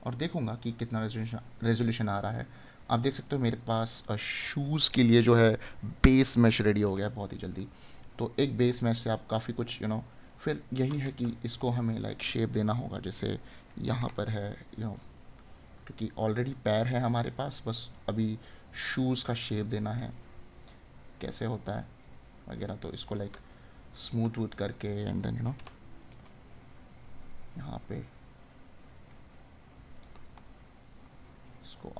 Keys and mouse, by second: 0.3 right click, 2.3 right click, 10.4 right click, 22.0 right click, 28.6 right click.